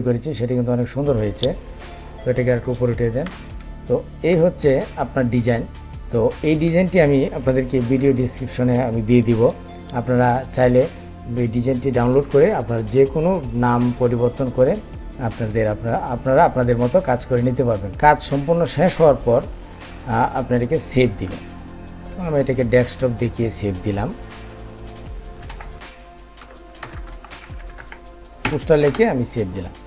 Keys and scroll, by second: 20.8 ctrl+shift+s.